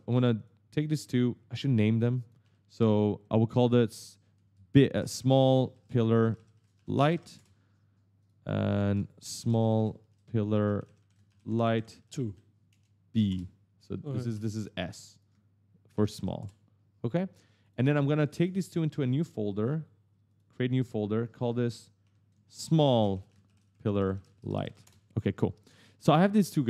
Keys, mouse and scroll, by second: 0.2 shift+click, 0.7 shift+click, 1.4 click, 2.0 click, 2.2 F2, 4.1-7.1 typing, 7.2 Return, 8.0 click, 8.5 F2, 8.7-12.6 typing, 13.1 Return, 13.8 click, 14.1 F2, 14.9 click, 15.5-16.4 typing, 17.4 shift+click, 18.3 right click, 20.1 click, 21.0 click, 21.5 click, 21.8 F2, 22.2-24.5 typing, 24.7 Return, 26.1 shift+click.